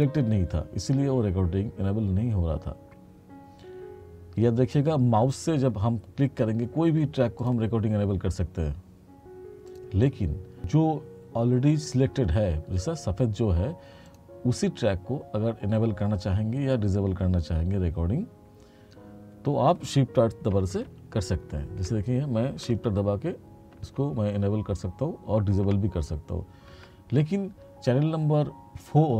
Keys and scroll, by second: 20.9 shift+r, 24.1 shift+r, 25.7 shift+r.